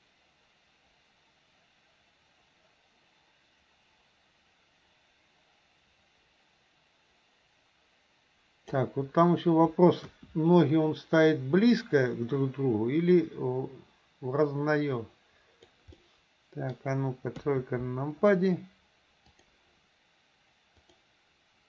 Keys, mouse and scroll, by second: 10.1 KP_1, 13.2-15.8 drag, 16.0-16.8 middle drag, 17.5 KP_3, 20.8 click.